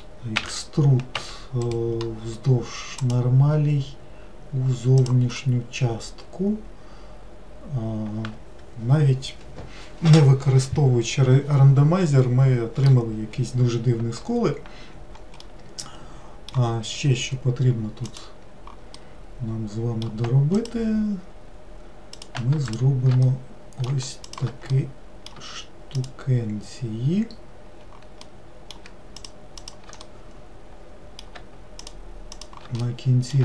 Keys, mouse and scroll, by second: 0.5 e, 3.2-4.9 right drag, 5.5-8.5 middle drag, 14.0-15.0 scroll down 1, 15.0-15.5 scroll down 1, 15.5-18.2 middle drag, 18.2 click, 19.1-20.7 middle drag, 20.7 click, 22.3 click, 22.8 shift+click, 23.4-24.4 middle drag, 24.4 shift+click, 24.8-26.1 middle drag, 26.1 shift+click, 28.3-29.3 middle drag, 29.3 shift+click, 29.7 shift+click, 30.2-31.9 middle drag, 31.9 shift+click, 32.4 shift+click, 33.0-33.4 middle drag.